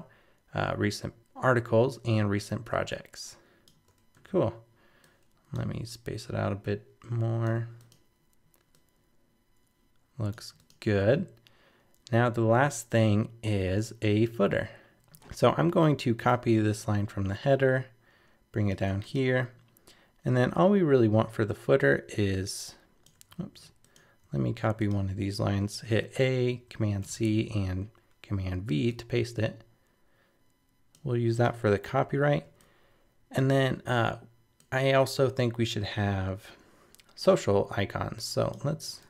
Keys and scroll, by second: 23.4 super+z, 26.5 super+c, 27.0 super+v.